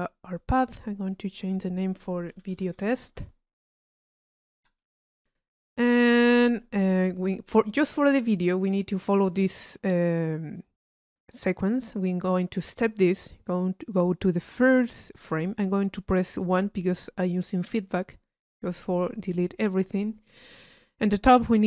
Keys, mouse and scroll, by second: 0.5-2.7 drag, 7.2 click, 11.7 click, 14.6-21.6 drag.